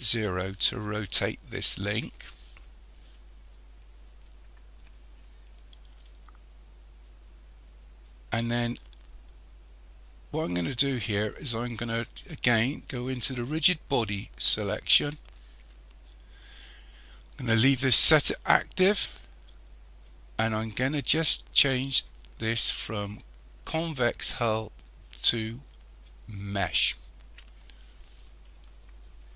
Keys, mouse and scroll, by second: 2.3-5.5 scroll down 2, 15.2 click, 24.6 click.